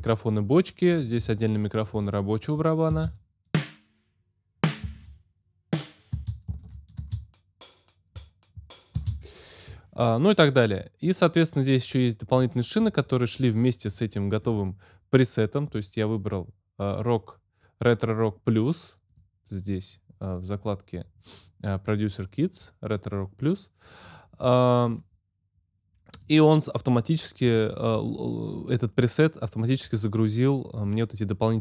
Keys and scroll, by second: 2.8 space, 6.4 alt+space, 7.8 space, 8.9 space.